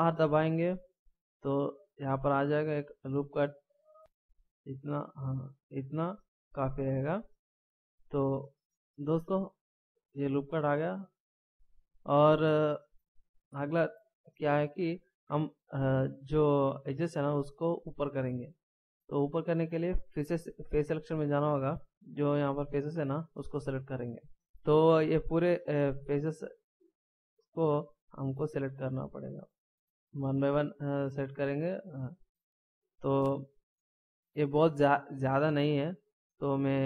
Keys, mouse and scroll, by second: 0.0 ctrl+r, 10.6 right click, 14.2 middle click, 21.1 click, 22.6 right click, 24.6 middle click, 26.4 shift+right click, 33.9 middle click, 36.2 scroll down 1.